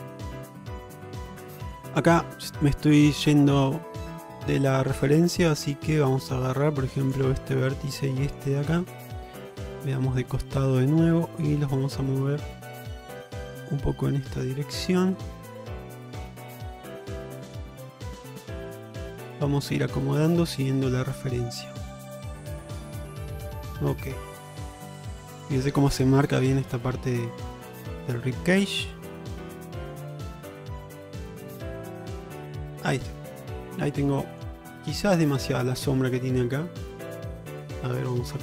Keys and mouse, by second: 0.4 shift+middle click, 1.1 shift+middle click, 4.9 shift+middle click, 5.2 middle click, 5.8 alt+z, 6.1 middle click, 7.1 click, 7.4 middle click, 8.3 shift+click, 8.9 middle click, 9.4 alt+z, 9.7-10.2 alt+middle drag, 11.6-13.8 drag, 14.3 shift+middle click, 14.9 shift+middle click, 15.9 shift+middle click, 17.3 click, 18.1 click, 19.0 shift+middle click, 20.1 shift+middle click, 20.7 click, 21.7-22.8 drag, 23.3 alt+z, 23.7 middle click, 24.1 Tab, 24.7 shift+middle click, 29.8 middle drag, 30.7 q, 31.6 Tab, 33.0 click, 33.6-34.0 alt+middle drag, 34.3 shift+middle drag, 36.3-36.9 middle drag, 37.6 Tab.